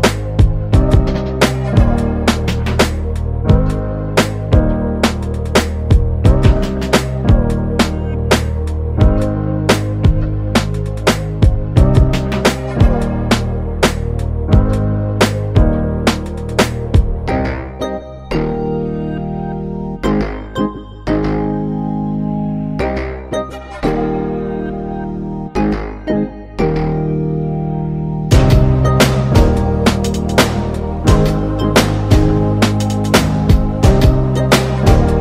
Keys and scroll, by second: 1.7 [, 12.5 ctrl+space, 13.1 ctrl+space, 13.7-14.8 ctrl+space, 20.1 ctrl+space, 20.6 ctrl+space, 21.6-22.4 ctrl+space, 23.8 [, 24.1-25.6 [.